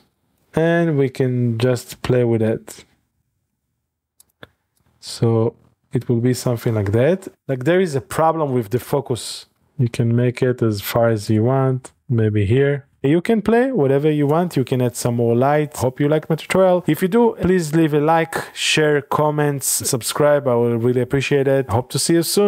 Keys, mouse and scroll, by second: 0.5 click, 1.8-3.1 shift+drag, 1.9 shift+d, 3.6 click, 3.6 shift+d, 4.2 click, 4.4 click, 6.6 click, 6.8-7.3 scroll up 1, 7.3 space, 8.8 click, 8.8 space, 9.8-10.2 drag, 10.5-11.8 drag, 11.4 d, 12.2 click, 13.0 click, 13.2-14.7 drag.